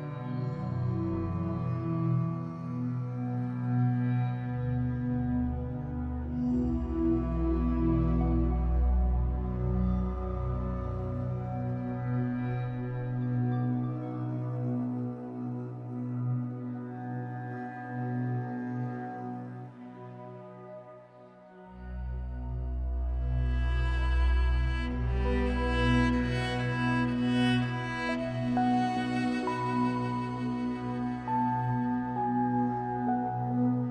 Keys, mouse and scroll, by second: 0.5 scroll up 2, 2.6-8.8 drag, 8.4-8.8 scroll down 2, 8.8-13.2 middle drag, 9.7-10.6 scroll up 2, 10.6-12.1 scroll up 2, 12.1-12.5 scroll up 1, 13.2-25.4 shift+drag, 15.7-16.1 scroll down 2, 16.1-16.6 scroll up 1, 18.9 scroll down 1, 22.5 scroll up 1, 25.4-27.2 middle drag, 27.2 click, 27.5-31.6 shift+middle drag, 28.3 scroll up 2, 28.9 scroll down 2, 31.6-33.9 drag.